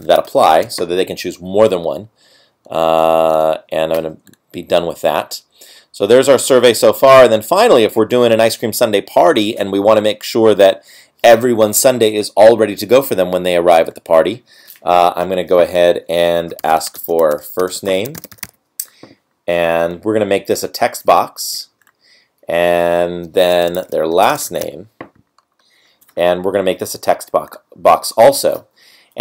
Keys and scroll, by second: 0.0-3.3 space, 17.1 space, 17.8 BackSpace, 17.9 BackSpace, 24.1 space.